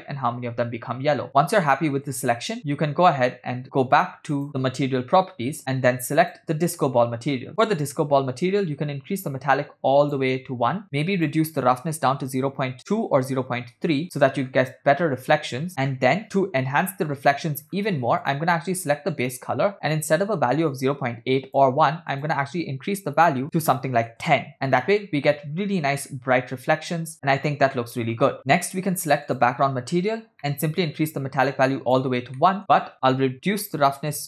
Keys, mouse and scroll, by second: 1.4 space, 2.4 space, 4.4 click, 6.2 click, 7.7 middle click, 8.5-10.3 drag, 11.0 middle click, 11.2-14.0 drag, 14.6 middle click, 14.6-15.2 scroll up 3, 15.9 click, 15.9 scroll down 3, 16.0 middle click, 16.3 scroll up 1, 17.7-18.2 scroll up 2, 18.3 click, 27.3 scroll down 2, 28.4 space, 29.3 click, 30.4 middle click, 30.9-32.0 drag, 32.6 middle click, 32.7-34.2 drag.